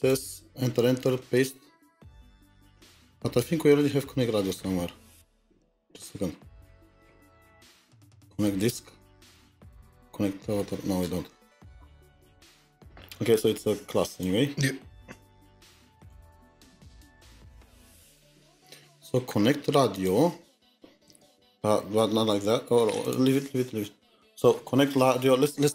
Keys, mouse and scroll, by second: 1.3 middle click, 1.4 Return, 2.4 typing, 3.4 typing, 4.6-5.4 scroll down 5, 5.1 ctrl+z, 5.3 ctrl+z, 6.2-8.2 scroll down 7, 8.2-8.8 scroll down 1, 8.8-10.1 scroll down 5, 10.1-10.6 scroll down 3, 10.6-12.3 scroll up 24, 17.2 scroll, 17.3 click, 20.5-21.6 typing, 21.8 Return.